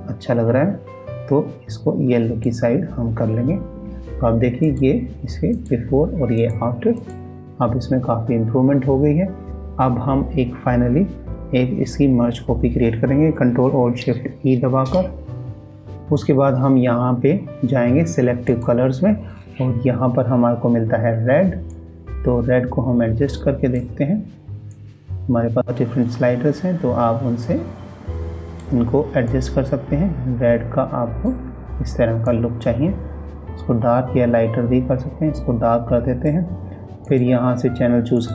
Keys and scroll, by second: 14.3 ctrl+alt+shift+e.